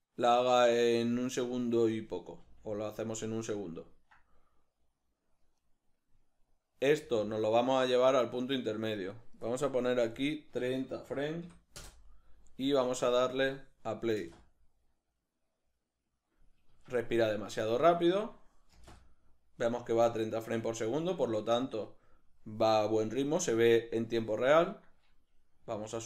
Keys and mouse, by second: 1.1 click, 2.4 g, 3.2 click, 3.9-5.6 ctrl+middle drag, 5.6 right click, 7.0 g, 9.0 click, 11.8 Return, 11.8-17.6 drag, 14.2 space, 16.7 Escape, 17.6 right click, 18.7 space, 21.0 Escape, 25.8 g.